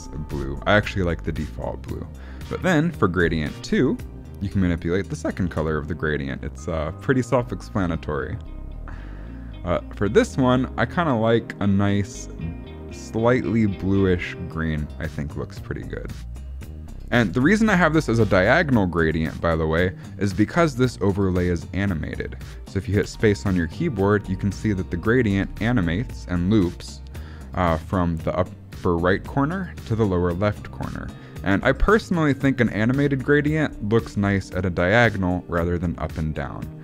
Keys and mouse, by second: 0.2 ctrl+z, 3.1 click, 4.3 click, 23.0 space.